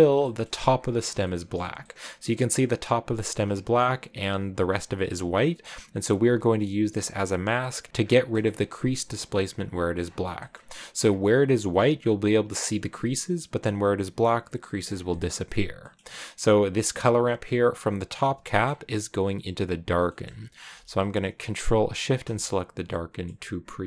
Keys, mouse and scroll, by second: 0.0 shift+middle click, 1.1-3.9 shift+middle drag, 3.9-5.6 drag, 6.8 click, 7.4 click, 7.9-12.4 shift+middle drag, 12.4-21.9 drag, 22.5 click, 22.7-23.8 middle drag.